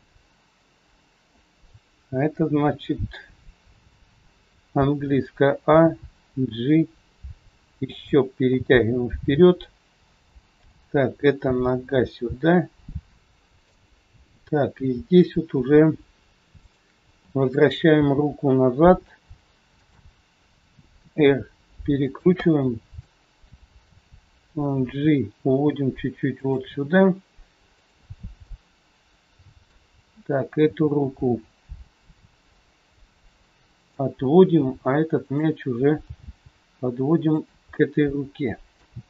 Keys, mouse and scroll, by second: 7.9 a, 7.9 g, 11.0 click, 11.4 g, 13.2 shift+middle click, 13.2 scroll up 2, 14.0 scroll up 3, 15.2 click, 16.6 shift+click, 18.5 g, 22.0 r, 22.5 middle click, 23.3 scroll down 1, 23.9 scroll down 2, 24.9 g, 27.6 click, 28.3 middle click, 31.0 g, 34.4 scroll up 2, 35.2 click, 36.1 g, 37.7 middle click.